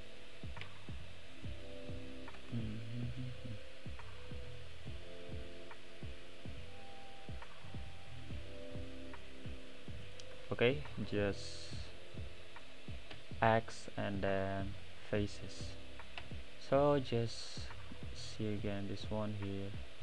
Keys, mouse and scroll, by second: 0.2-1.3 middle drag, 1.3 shift+click, 3.2 c, 15.0 x, 15.4-16.3 middle drag, 16.3 Tab, 17.5 click, 18.1-19.4 middle drag, 19.4-19.8 scroll up 2, 19.8-20.0 middle drag.